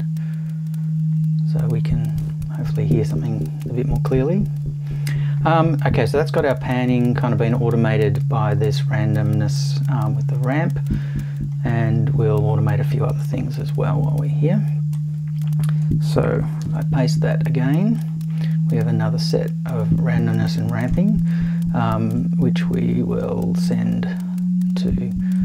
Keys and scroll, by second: 16.6 super+v.